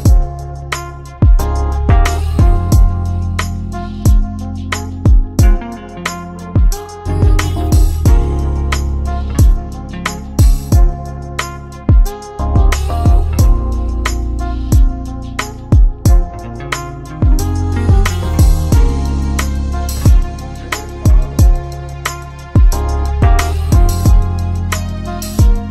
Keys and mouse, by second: 1.4 shift+d, 7.1 Tab, 8.8-9.6 drag, 9.6-11.2 middle drag, 11.2 click, 13.1-14.0 drag, 14.0-15.2 middle drag, 15.2 click, 16.1-18.1 middle drag, 18.1 g, 22.3 ctrl+z, 22.6-25.7 ctrl+z.